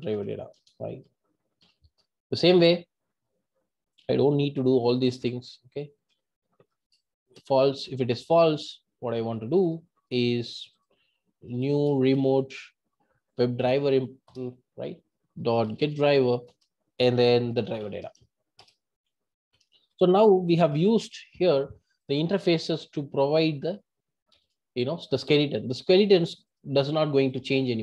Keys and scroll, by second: 5.6 Tab, 14.3 Return, 16.7 Return.